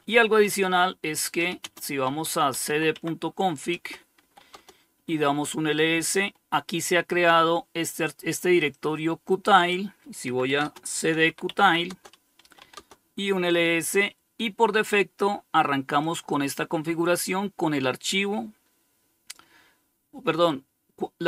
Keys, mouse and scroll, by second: 0.0-3.9 typing, 3.0 Return, 7.9-8.9 drag, 9.3-12.3 typing, 15.3-18.6 drag.